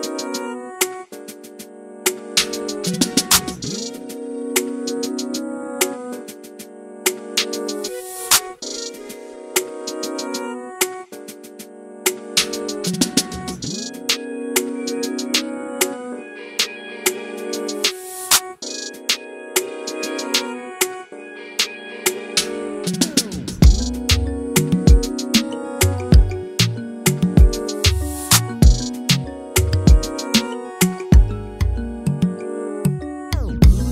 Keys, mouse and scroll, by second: 0.0 ctrl+space, 0.6 z, 0.8 scroll up 2, 5.1 click, 11.3 ctrl+space, 14.6 scroll down 2, 14.7 shift+middle click, 14.8-15.2 scroll up 3, 15.2 click, 16.4 x, 16.9 ctrl+v, 18.0-22.3 drag, 22.8 scroll down 6, 23.0 scroll up 1, 23.2 scroll down 5, 23.4 shift+middle click, 24.4 scroll up 1, 29.6 scroll down 1, 29.7 scroll up 5, 30.0-31.0 middle drag, 31.2 KP_0, 31.6 scroll down 1, 31.7-32.4 scroll up 3, 32.0-33.9 shift+middle drag, 32.4 scroll down 1.